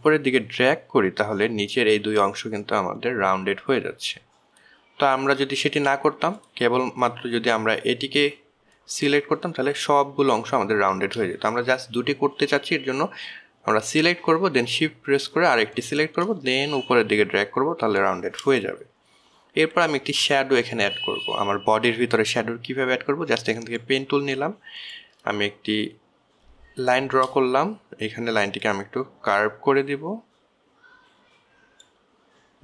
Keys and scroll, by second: 7.0 ctrl+z.